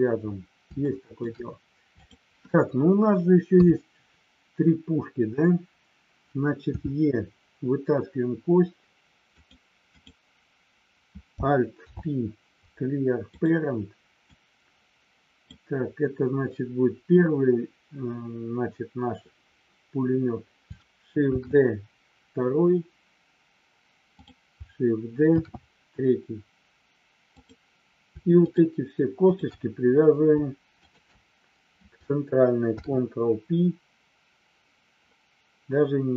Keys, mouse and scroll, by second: 0.8 shift+middle click, 2.0 click, 3.5 KP_3, 9.4 click, 10.0 click, 11.8 alt+p, 14.4-15.5 drag, 24.1 click, 27.2 click, 28.4 shift+click, 29.2 shift+click, 30.7 shift+click, 32.6 ctrl+p.